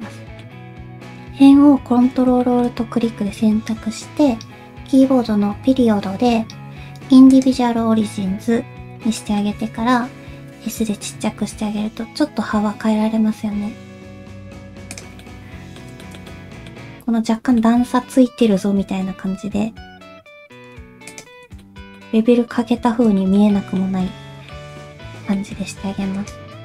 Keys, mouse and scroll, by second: 0.5-1.1 scroll up 1, 2.4 shift+middle click, 9.2 middle click, 9.2 o, 10.4 s, 15.2 middle click, 16.0 shift+middle click, 16.3 middle click, 16.7 scroll up 1, 17.6 middle click, 19.1 s, 21.6 shift+middle click, 22.0 middle click, 23.2 shift+middle click, 23.5 middle click, 24.1 shift+middle click, 24.7 middle click, 25.4 shift+middle click, 26.2 ctrl+alt+click.